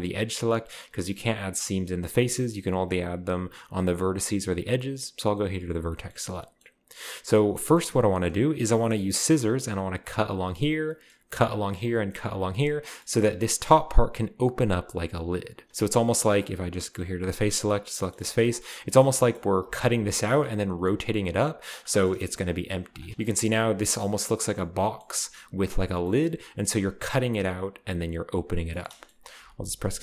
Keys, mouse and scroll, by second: 4.0-5.1 drag, 6.1-7.1 middle drag, 7.1-7.5 scroll down 1, 7.5-10.1 scroll up 1, 10.8-11.8 middle drag, 12.6-13.6 scroll down 1, 17.0-18.0 drag, 17.7 right click, 18.0-19.8 shift+middle drag, 18.4-19.0 shift+scroll up 1, 19.0 scroll down 1, 19.7-21.4 typing, 19.8-21.9 drag, 21.9 middle click, 22.7 right click, 22.8 x, 23.1 g, 23.7 right click, 24.3-26.0 drag, 26.0-28.6 middle drag, 28.9 shift+middle click, 29.4 ctrl+z, 29.5 ctrl+z.